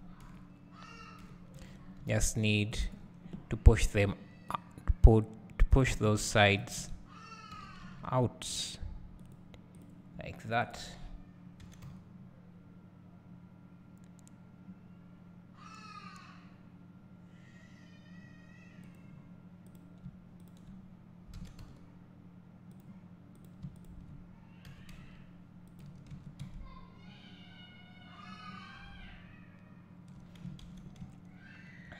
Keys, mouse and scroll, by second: 0.3 KP_4, 1.2 KP_7, 1.6 Tab, 2.9 click, 4.5-5.8 drag, 6.6 shift+click, 7.7 g, 9.8 click, 10.7 shift+click, 11.7 g, 19.8 click, 20.5 shift+click, 21.5 g, 23.4 click, 24.8 g, 26.2 Tab, 26.6 `, 27.2 click.